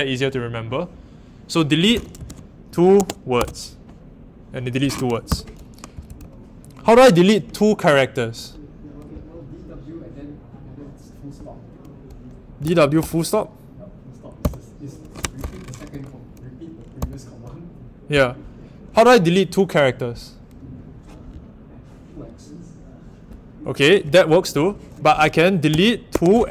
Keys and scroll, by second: 1.7-3.8 typing, 5.7-6.6 typing, 12.5-12.9 typing, 15.1 Escape, 15.3-15.8 typing, 25.7-26.1 typing.